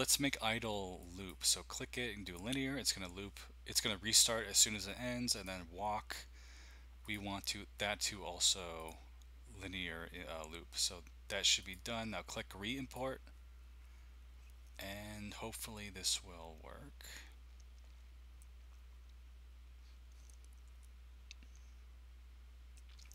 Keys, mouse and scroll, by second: 1.1 click, 2.2 click, 5.3 click, 7.0-8.4 drag, 8.8-11.2 drag, 11.6 click, 13.1 click.